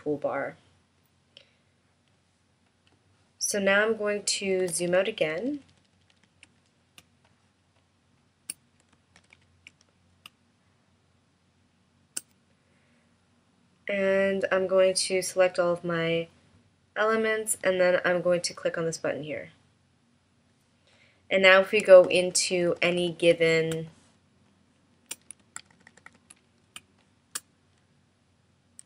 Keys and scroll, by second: 4.8 super+-, 7.1 space, 9.3 super+-, 10.4 space, 22.1 super+=, 23.8 space, 25.6 super+=, 26.9 space.